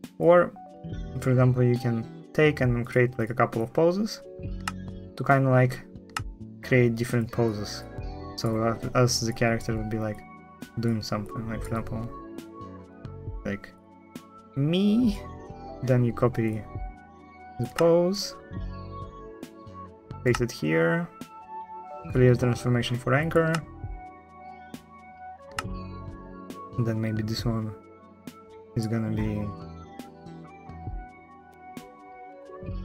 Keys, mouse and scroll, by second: 4.4 space, 5.8 space, 23.2 space, 25.3 space.